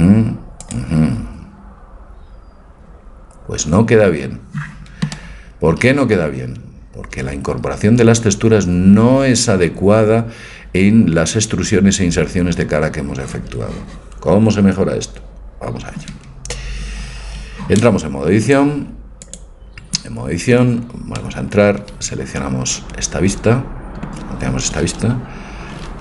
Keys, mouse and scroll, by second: 3.1-4.2 middle drag, 18.4-20.6 drag, 20.6 Tab.